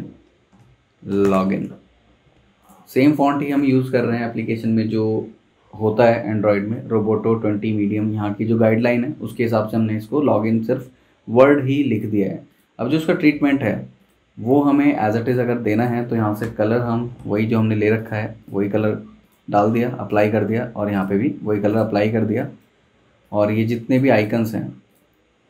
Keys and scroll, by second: 0.5-1.9 typing, 2.4 Escape, 16.4-17.2 typing, 22.9 super+z.